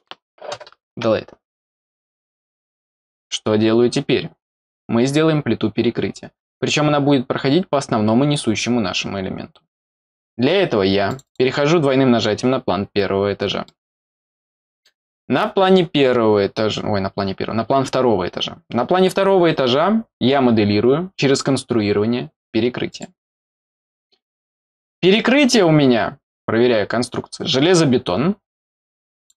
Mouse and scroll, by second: 11.1 click, 11.2 click, 12.4-12.9 scroll up 2, 13.6-14.8 middle drag, 22.9 click.